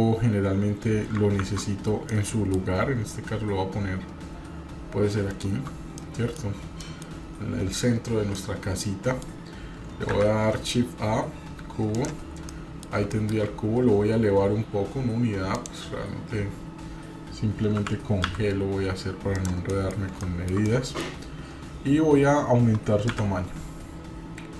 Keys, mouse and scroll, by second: 0.3-0.9 scroll up 1, 1.4 ctrl+2, 2.0-2.6 middle drag, 2.0 scroll down 1, 2.7-3.3 scroll up 2, 5.4 shift+right drag, 6.0-6.6 middle drag, 6.6 scroll down 2, 6.8-7.5 middle drag, 8.3-9.4 middle drag, 10.1 shift+a, 12.5-12.9 middle drag, 13.1-13.4 shift+middle drag, 13.4-13.9 scroll up 4, 15.5 click, 17.7 g, 19.7 middle drag, 19.9 scroll down 2, 20.2-20.6 shift+middle drag, 20.6-21.0 middle drag, 23.1 s.